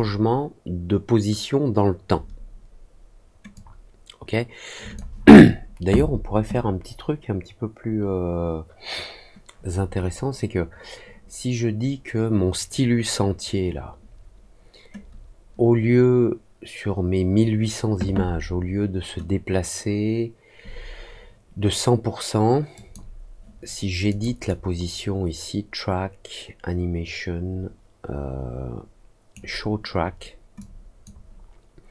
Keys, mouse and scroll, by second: 3.5-4.9 drag, 22.7 click, 24.0 click, 24.4-29.3 right drag, 30.5 click.